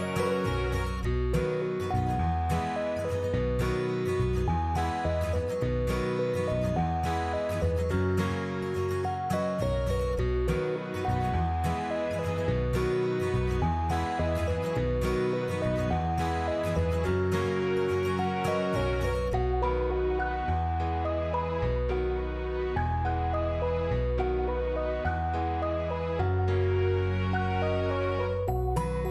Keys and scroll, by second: 3.5 i, 8.4-11.5 typing, 21.5 3, 21.9 Return.